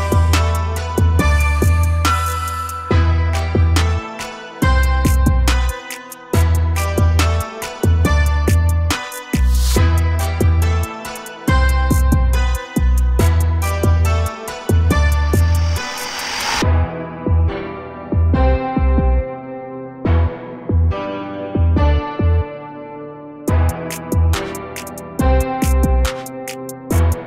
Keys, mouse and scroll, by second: 6.1 click, 6.9 click, 13.8-16.8 drag, 16.9-17.2 scroll down 1, 17.2 a, 17.4 a, 19.8 click, 21.8 click, 22.8-24.5 drag, 26.7-27.2 scroll up 1.